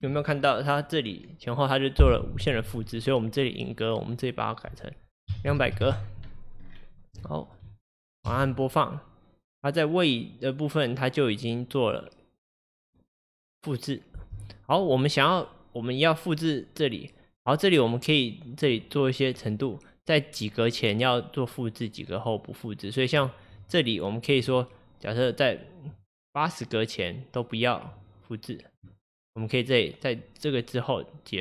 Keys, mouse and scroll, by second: 5.7 KP_0, 6.7-7.3 scroll down 1, 7.3 shift+middle click, 7.6 shift+scroll up 1, 7.9 click, 7.9-8.3 scroll down 1, 8.3 space, 14.3 space, 15.5-18.6 drag, 21.5-31.4 drag.